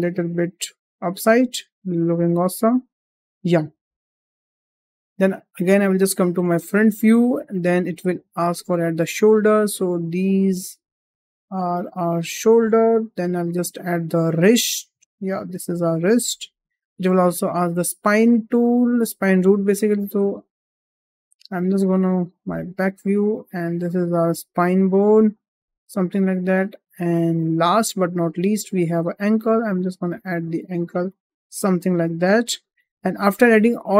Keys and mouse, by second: 0.0 g, 4.4 shift+middle click, 6.5 shift+middle click, 6.6 shift+middle click, 8.5 shift+middle drag, 9.6-12.3 drag, 12.7 shift+middle drag, 13.7-15.9 drag, 16.5 shift+middle drag, 17.6 shift+middle drag, 18.6-20.6 drag, 21.2 `, 23.7 g, 25.7 `, 27.7 shift+middle click, 29.5-31.6 drag.